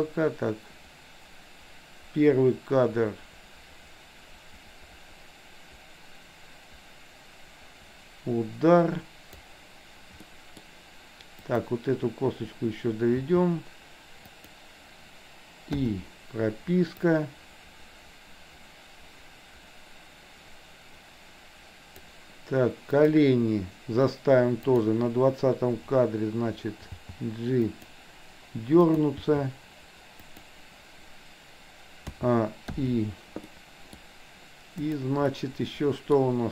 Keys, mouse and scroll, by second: 10.3 middle click, 11.3 click, 13.2 r, 15.8 i, 17.1-22.2 drag, 23.1 click, 24.8 click, 27.1 g, 29.0 click, 29.2 g, 32.2 a, 32.7 i, 33.6-34.0 middle drag, 34.8 click, 35.3-36.2 middle drag.